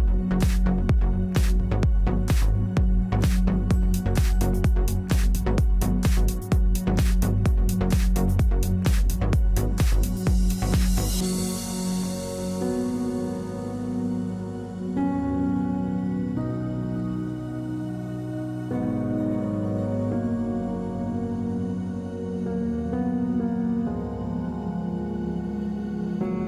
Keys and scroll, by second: 11.0 space, 12.7 space, 26.2 w.